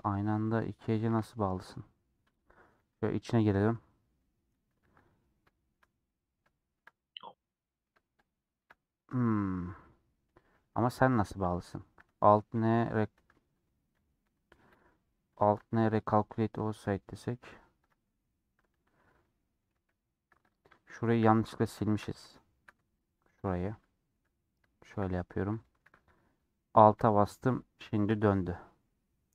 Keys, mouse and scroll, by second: 1.2 middle click, 1.6 scroll up 2, 2.7 KP_Decimal, 3.1 middle click, 3.7 scroll down 2, 3.9 scroll up 2, 4.1 middle click, 4.9 2, 5.2 scroll down 2, 5.4 shift+middle click, 5.9 scroll down 2, 6.0-8.2 middle drag, 8.2 shift+click, 8.8 middle click, 9.3-9.7 scroll down 5, 9.7 middle click, 10.1 scroll up 1, 10.5 middle click, 10.8 1, 12.0 a, 16.5-17.8 middle drag, 17.8-19.1 drag, 19.1 middle click, 19.8 ctrl+z, 20.5 click, 20.7-23.2 shift+middle drag, 23.2 shift+click, 23.7 j, 24.0-26.1 middle drag, 26.1 3, 27.1-27.5 scroll down 5, 27.5-29.3 shift+middle drag.